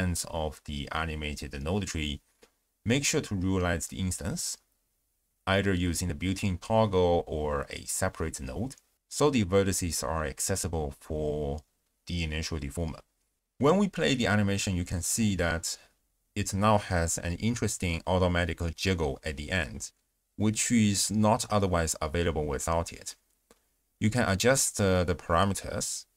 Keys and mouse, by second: 4.6 click, 5.3 ctrl+a, 13.9 click, 14.3 x, 14.8 shift+space, 15.7 z, 16.7 space, 18.8 shift+space, 20.6 click, 20.9 space, 21.2 m, 21.5 space, 23.2 space, 23.9 click, 24.1 m, 24.6 shift+space.